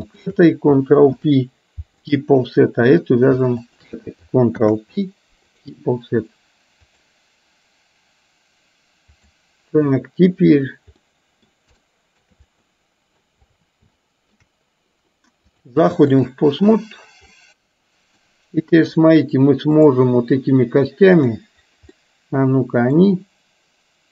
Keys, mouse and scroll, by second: 0.1 shift+click, 1.9 ctrl+p, 3.0 click, 5.7 ctrl+p, 6.8-9.3 drag, 11.1 middle click, 11.8-12.3 shift+middle drag, 12.7 middle click, 14.0 shift+middle click, 15.5 click, 17.5-18.3 middle drag, 21.3 click, 22.0-23.1 middle drag.